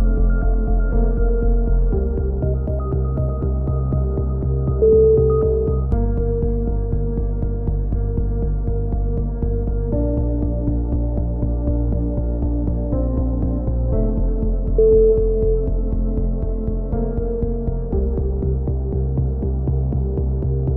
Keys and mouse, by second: 0.8 a, 4.5 click, 5.2 Tab, 5.4 right click, 5.7-6.8 drag, 6.1 ctrl+z, 6.9 click, 7.7 click, 7.8 KP_1, 8.2 click, 8.7 click, 9.6 click, 9.8 KP_3, 10.2 q, 10.5 a, 10.5 z, 10.8 Tab, 11.1 click, 12.6 click, 13.0 right click, 13.6 KP_3, 13.8 a, 13.9 z, 14.2 ctrl+r, 15.0-16.9 right drag, 17.1 z, 17.2 click, 18.0 click, 18.6-19.7 right drag, 19.5 click, 19.8 a.